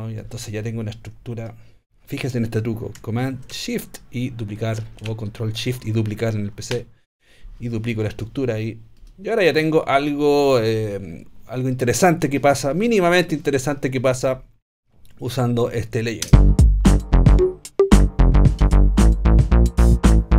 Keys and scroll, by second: 6.7 shift+super+d.